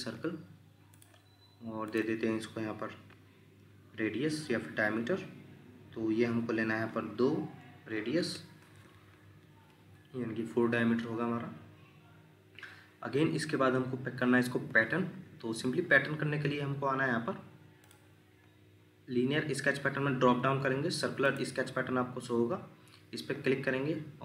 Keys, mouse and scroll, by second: 7.8 4, 8.2 Return, 11.3 scroll down 1, 14.7 Escape, 22.6 scroll up 1.